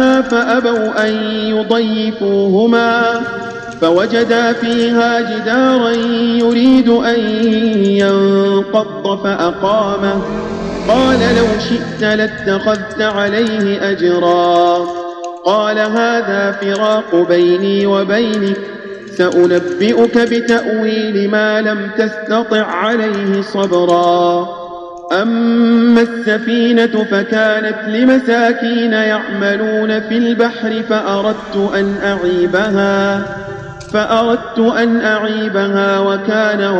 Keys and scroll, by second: 0.9 space, 4.6 space, 6.3 space, 12.7 space, 13.4 space, 16.7 space, 18.2 space, 19.2 space, 20.4 space, 23.8 space.